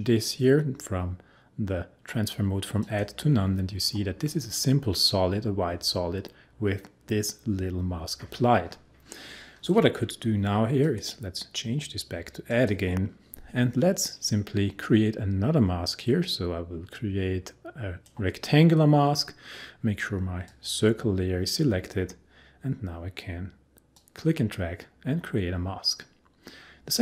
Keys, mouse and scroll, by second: 4.5 click, 10.8 click, 16.0-20.5 drag, 24.0-27.0 drag.